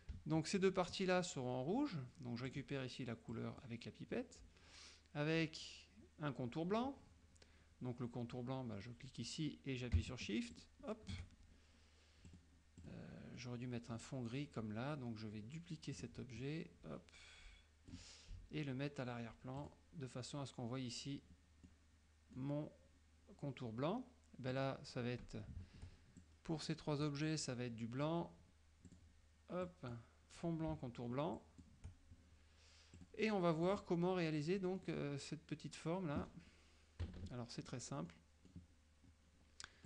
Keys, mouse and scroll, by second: 0.6 shift+click, 2.6 click, 3.4 click, 10.6 shift+click, 12.4 click, 12.9 click, 13.4-14.2 middle drag, 16.0 click, 16.5-18.2 drag, 19.7 click, 21.7-22.6 middle drag, 24.6 click, 26.3-27.3 shift+drag, 28.9 click, 29.7 click, 31.4 shift+click, 33.0 click, 33.7 click, 34.8 middle click, 37.1 KP_Subtract, 38.2 middle click.